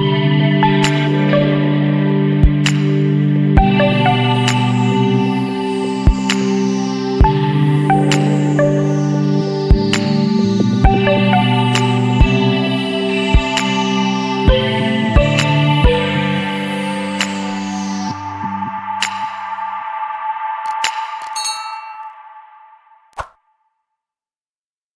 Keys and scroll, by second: 1.0 Return, 7.5 space.